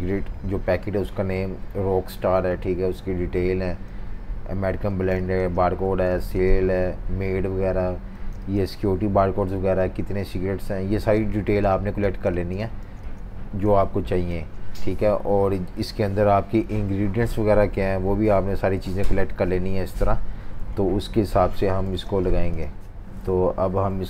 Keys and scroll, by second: 3.9 v, 5.1-5.8 typing, 8.1 typing, 10.9-14.3 typing, 20.8 super+-, 21.0 super+-, 21.8-22.5 typing, 23.2 super+-, 23.4 super+-.